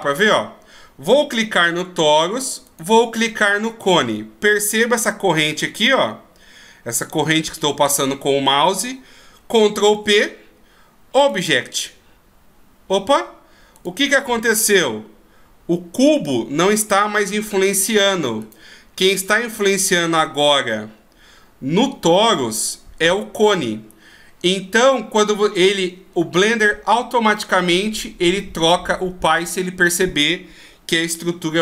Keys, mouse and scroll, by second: 2.6 shift+right click, 9.9 ctrl+p, 13.7 right click, 14.6 g, 18.3 right click, 19.4 g.